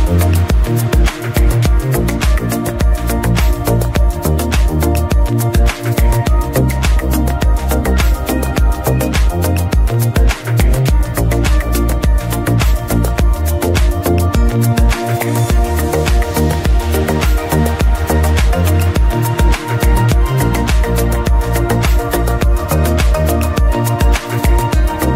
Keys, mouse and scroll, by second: 3.3 click, 4.7 scroll down 1, 6.2-8.0 scroll up 1, 8.0 click, 8.0 b, 9.7-10.1 scroll up 2, 10.1-11.8 drag, 11.8 b, 13.4-16.2 drag, 16.2 b, 18.4-20.6 drag, 20.6-25.1 middle drag.